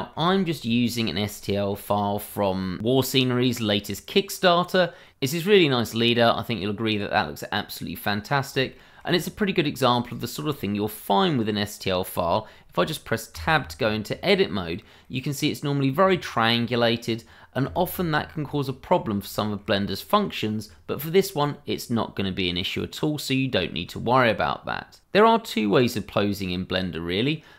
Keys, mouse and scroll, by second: 0.6-1.3 scroll up 1, 1.4 shift+middle click, 1.4 middle click, 1.5 shift+middle click, 5.0 middle click, 8.2-8.7 scroll up 1, 8.8 shift+middle click, 9.2-10.0 scroll up 1, 10.1 shift+middle click, 10.1 middle click, 10.3 shift+middle click, 10.5-11.0 scroll up 1, 13.3 Tab, 14.5 scroll up 1, 15.0 middle click, 16.3 scroll up 1, 16.6-17.0 scroll down 1, 17.6 Tab, 18.0-18.5 scroll down 1, 18.5 middle click, 18.9 scroll down 1, 19.3 shift+middle click, 19.8 middle click, 23.6 shift+middle click, 24.0 scroll up 1.